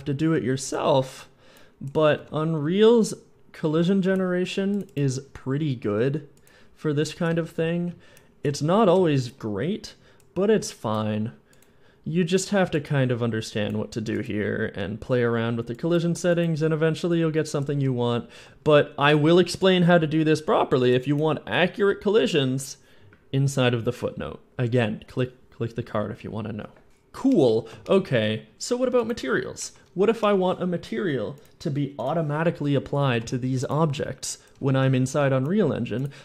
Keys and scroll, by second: 2.0-3.9 typing, 7.4 a, 8.4 w, 8.8 s, 17.6 a, 18.5 a, 34.4-35.4 typing.